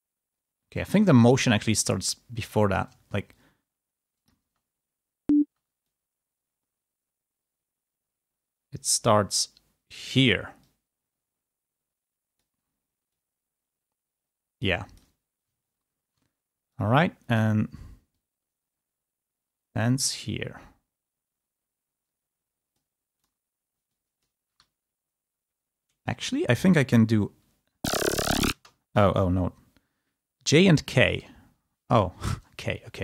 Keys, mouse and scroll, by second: 1.1 ctrl+scroll down 2, 1.7-2.9 ctrl+drag, 2.9-3.3 ctrl+scroll down 2, 3.3 ctrl+click, 4.3 space, 6.0-12.6 drag, 13.1-15.6 drag, 15.6 ctrl+scroll down 2, 17.2 click, 18.9-22.8 drag, 23.1-24.3 drag, 24.5 e, 27.7 l, 31.1 k, 32.7 ctrl+z, 32.9 click.